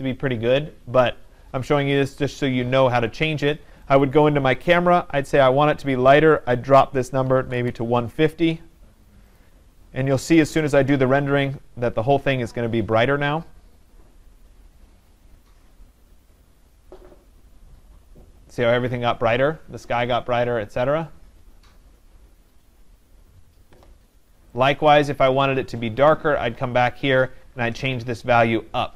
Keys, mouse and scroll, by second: 1.9 click, 4.0 click, 6.4 click, 7.1-8.2 typing, 9.4 click, 10.6 click, 24.7 click, 26.2 click.